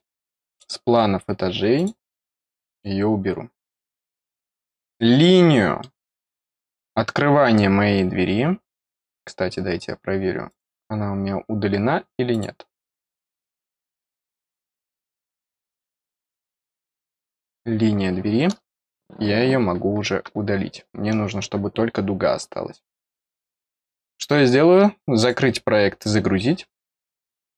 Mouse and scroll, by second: 0.4 click, 1.7 click, 2.6 click, 4.1 click, 4.6 scroll down 1, 4.9 middle click, 7.4-8.0 scroll down 1, 8.0-8.4 scroll up 2, 10.4 click, 12.3 click, 14.1 middle click, 15.7 click, 25.1 click.